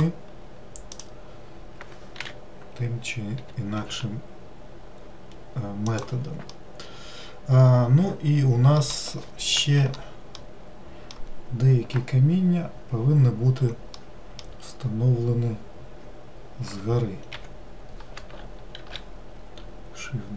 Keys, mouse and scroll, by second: 0.3 click, 1.4-2.5 drag, 2.6 l, 3.8 g, 6.9-10.1 middle drag, 10.8-13.9 middle drag, 14.4-17.4 middle drag, 18.5 l, 19.2 shift+d.